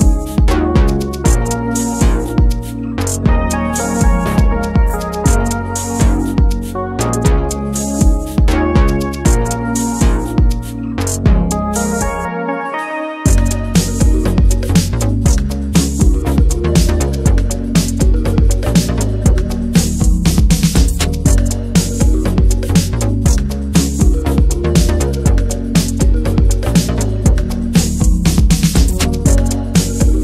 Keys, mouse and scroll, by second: 0.1 shift+middle click, 0.3-0.6 scroll up 1, 0.6-3.7 shift+middle drag, 3.7 f, 5.8-10.2 drag, 10.2-10.7 scroll down 8, 10.7-11.0 scroll up 1, 11.0 ctrl+z, 11.3 scroll up 1, 11.5-13.8 shift+middle drag, 13.8 alt+z, 15.1 click, 15.3 alt+z, 16.4-17.7 drag, 17.7 scroll down 2, 17.9 middle click, 18.1-18.6 scroll up 2, 18.6-21.2 shift+drag, 21.2 scroll down 1, 21.4 middle click, 21.8 alt+middle click, 22.5 scroll down 1, 22.8-23.7 scroll up 4, 23.7 click, 23.9 scroll up 2, 24.5-25.8 drag, 25.8 middle click, 26.2 scroll down 1, 26.3 shift+middle click, 26.7 ctrl+z, 27.0-28.1 drag, 28.1 ctrl+z, 28.5 shift+f, 30.0-30.2 drag.